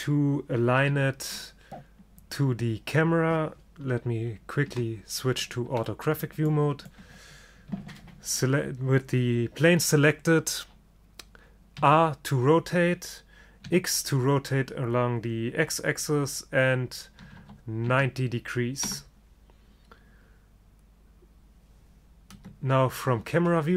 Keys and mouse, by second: 1.0 KP_3, 4.8 KP_5, 12.0 r, 22.5 KP_0.